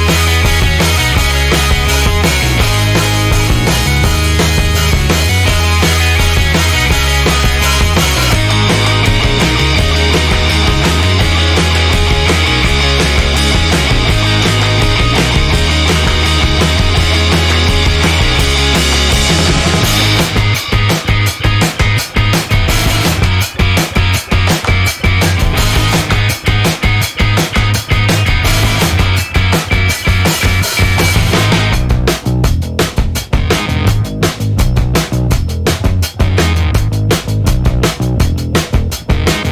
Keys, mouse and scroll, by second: 0.0-3.1 typing, 4.7 click, 7.1 click, 9.6 click, 10.3 click, 13.1-14.3 drag, 19.6 click, 21.4 click, 21.9 click, 23.1 0, 24.0 click, 24.8 click, 28.9 click, 30.4 click, 30.8 click, 32.3 click, 33.0 click, 33.4 space, 34.7 click, 34.9 space, 35.3 click, 36.1 click, 36.3 space, 36.7 click.